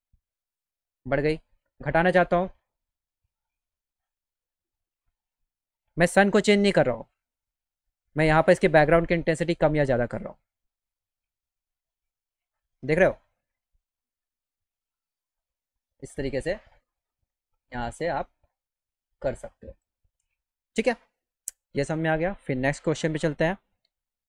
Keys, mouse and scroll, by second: 4.2 click, 6.2 click, 11.5 click.